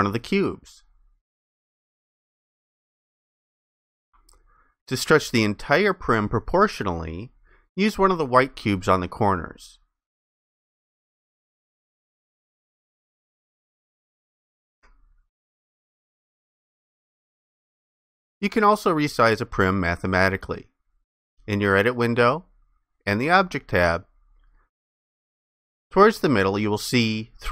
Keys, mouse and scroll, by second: 8.9 ctrl+shift+click.